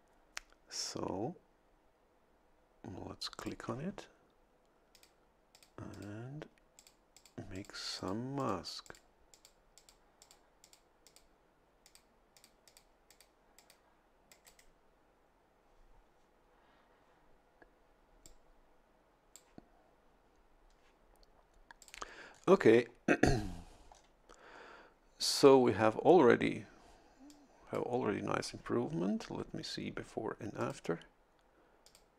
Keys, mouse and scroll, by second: 3.4 click, 4.9 click, 5.5 click, 5.9 click, 6.8 click, 7.1 click, 7.5 click, 8.0 click, 8.4 click, 8.8 click, 9.3 click, 9.8 click, 10.2 click, 10.6 click, 11.0 click, 11.8 click, 12.3 click, 13.1 click, 13.6 click, 14.3-17.9 drag, 14.5-17.9 right drag, 18.3-19.5 drag, 21.8 click, 22.3-23.0 scroll down 2, 23.9-24.3 scroll down 1, 24.7 scroll up 1, 25.4 scroll up 1, 27.3 click, 30.6 click, 31.9 click.